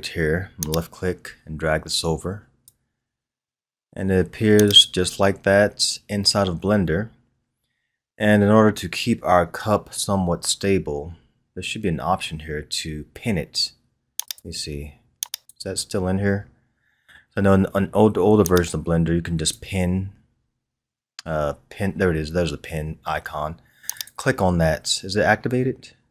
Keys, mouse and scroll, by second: 6.6-9.6 scroll down 1, 11.0-12.0 scroll down 2, 12.0-14.1 scroll down 1, 18.8-21.3 drag, 21.3-22.7 scroll down 4, 23.9 click.